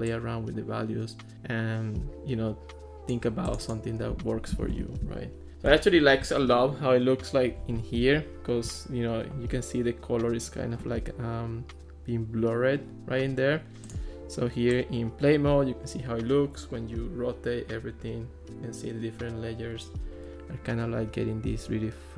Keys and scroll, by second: 4.6 Escape.